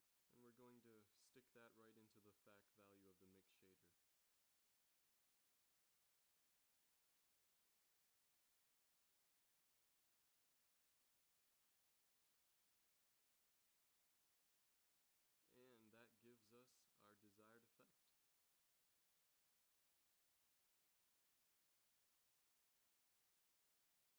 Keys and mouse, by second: 4.5-6.4 middle drag, 6.4-8.5 drag, 15.0-16.6 middle drag, 16.6 shift+z, 18.3-19.4 middle drag, 22.7 z, 23.9 z.